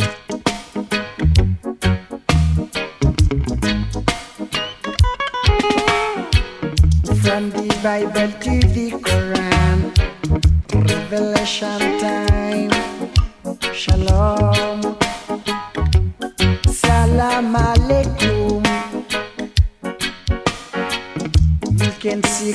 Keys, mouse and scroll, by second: 1.5 click, 4.4 ctrl+click, 11.4 click, 15.7 shift+click.